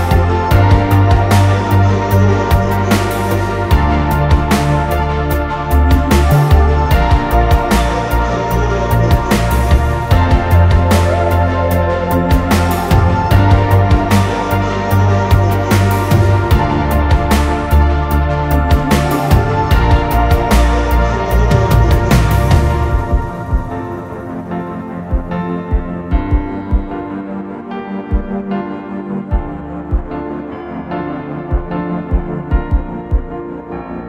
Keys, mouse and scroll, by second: 0.0-5.7 typing, 1.7 Escape, 7.7-10.8 typing, 15.2 space, 16.3 Delete, 16.9-21.7 typing, 21.2-21.6 scroll down 2, 23.1-23.8 typing, 25.0 typing, 26.1-26.9 typing, 29.1-30.7 typing.